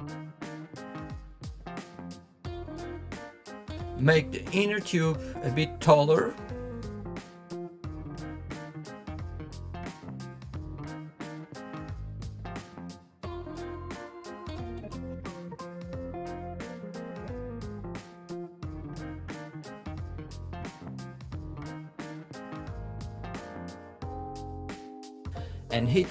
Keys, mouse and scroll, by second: 2.7-6.3 scroll up 3, 6.3-8.0 middle drag, 9.3-12.2 shift+middle drag, 12.2 KP_1, 13.7 click, 15.7 click, 19.8 ctrl+z, 20.6 click, 21.6 click, 23.0 click, 24.2 ctrl+r.